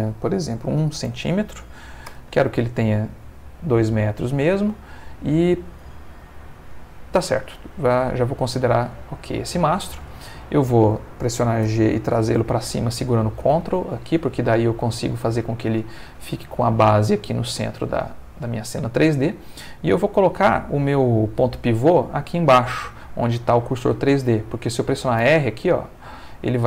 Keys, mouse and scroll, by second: 0.6 1, 1.0 c, 1.1 m, 2.1 Return, 6.7 middle click, 7.4-8.8 ctrl+middle drag, 8.9 ctrl+shift+middle click, 11.6 g, 12.1 z, 13.4 ctrl+space, 13.9 ctrl+shift+middle click, 15.1 middle click, 15.6 shift+middle click, 17.2-19.5 middle drag, 25.2 r.